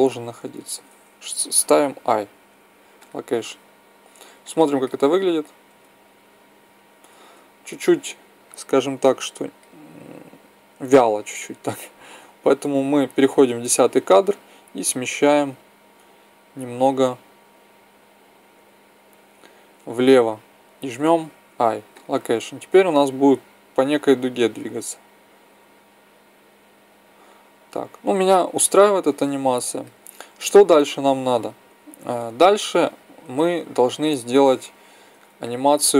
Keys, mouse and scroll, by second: 2.5 i, 4.4-5.9 drag, 5.6 alt+a, 7.2 Escape, 14.2-16.3 drag, 21.3 i, 22.8 click, 33.5-34.6 middle drag.